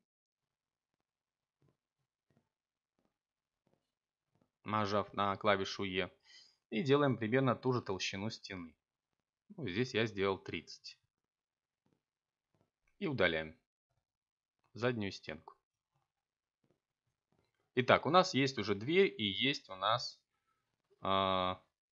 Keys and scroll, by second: 1.7 7, 10.2 x, 18.4 Tab.